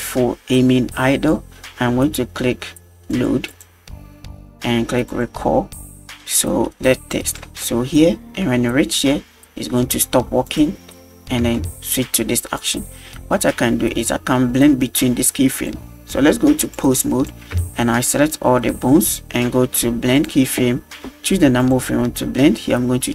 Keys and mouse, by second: 3.1 click, 3.5-3.9 drag, 5.1 click, 7.2 drag, 7.5 space, 10.5 click, 11.4 space, 12.6 click, 16.8-17.3 drag, 17.5 a, 20.2 click, 21.6 click.